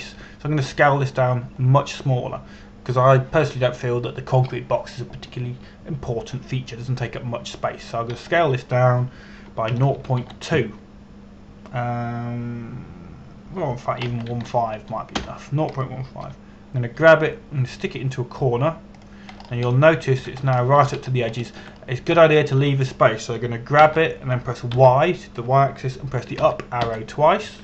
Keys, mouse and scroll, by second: 9.7 s, 11.4 KP_0, 11.6 KP_Decimal, 11.9 KP_2, 15.7 BackSpace, 16.0 KP_1, 16.1 KP_5, 16.9 Return, 18.6 g, 20.6 click, 21.0 scroll up 1, 21.4 shift+middle click, 22.2 shift+middle click, 22.7 scroll up 1, 23.1 shift+middle click, 23.5 scroll up 1, 23.9 shift+middle click, 25.4 middle click, 25.5 g, 26.4 y.